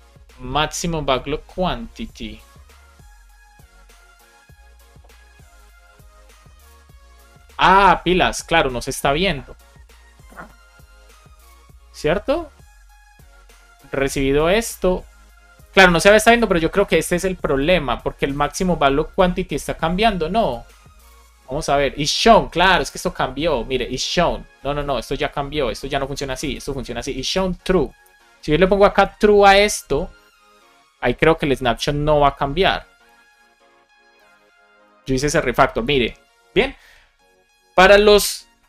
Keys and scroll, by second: 22.7 super+c, 26.6 super+v, 27.9 Left, 28.2 BackSpace, 29.3 super+s.